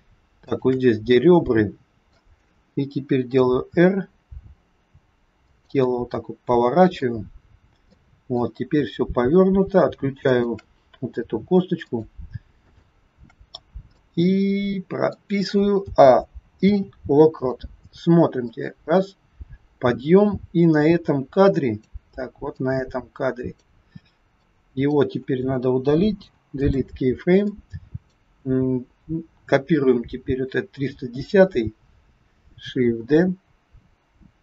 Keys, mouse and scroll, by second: 0.5 shift+click, 1.1 middle click, 3.4 r, 5.8 middle click, 7.2-7.8 scroll down 1, 7.8 middle click, 9.1-9.5 scroll up 1, 10.1 shift+click, 11.8 shift+click, 12.5 shift+click, 14.0 middle click, 15.7 a, 16.5 i, 18.5 click, 22.5 click, 24.3 click, 26.0 Delete, 27.3 click, 33.0 shift+d.